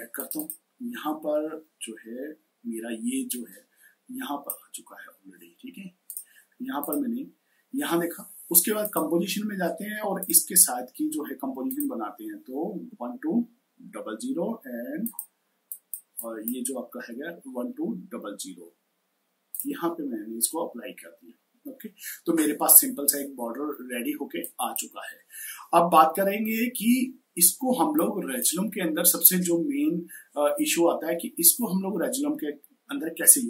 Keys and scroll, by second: 12.7 1, 13.6 0, 16.2-18.5 typing.